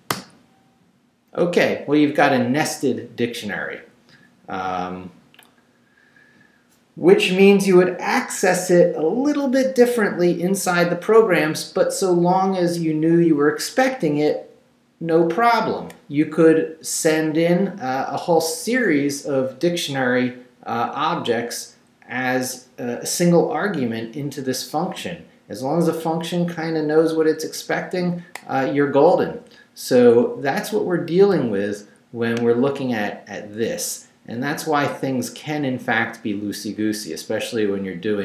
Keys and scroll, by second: 0.1 Return.